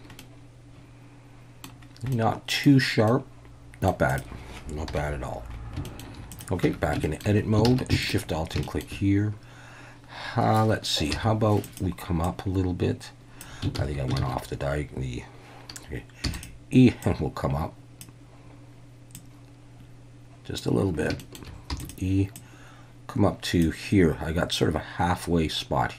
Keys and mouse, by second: 0.2-1.6 middle drag, 2.1-2.6 middle drag, 3.1-3.9 middle drag, 4.1 click, 4.9 KP_1, 5.8 shift+middle drag, 6.3 click, 6.6 Tab, 7.0 shift+middle click, 7.6 alt+a, 8.0 alt+shift+click, 8.6 shift+click, 11.1 e, 11.6 click, 12.2-13.4 drag, 13.8 ctrl+z, 14.2 ctrl+z, 16.2 e, 17.0 click, 19.2-20.6 drag, 21.2 shift+middle click, 21.7 e, 21.8-23.6 drag.